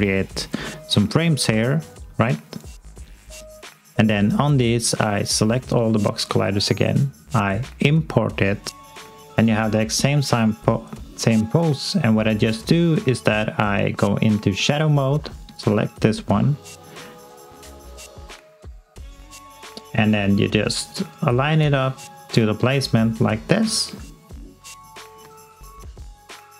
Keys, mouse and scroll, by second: 1.5 f, 3.1 click, 9.4 alt+middle click, 9.9 alt+click, 12.4 click, 15.3 alt+click, 15.8 alt+middle click, 18.3 alt+click, 19.7 click, 19.7 click, 22.5 alt+click, 23.7 alt+middle click, 24.2 alt+click, 24.7 click, 25.3 alt+click.